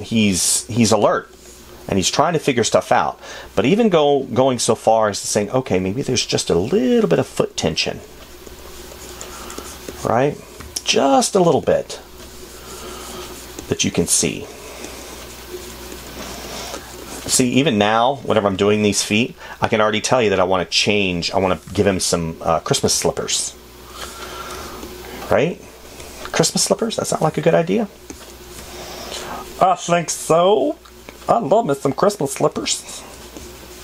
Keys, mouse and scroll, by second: 0.1 space, 11.0 space, 17.7 space, 22.0 space, 27.6 space.